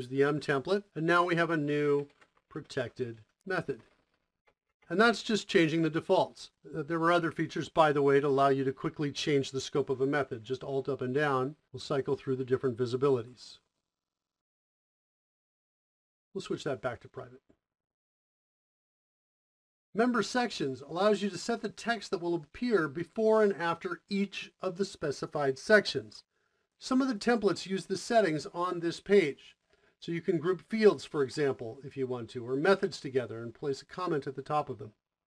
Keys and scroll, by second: 0.1 Return, 0.4-4.2 typing, 4.3 Return, 10.9 alt+Up, 11.3 alt+Up, 11.5 alt+Up.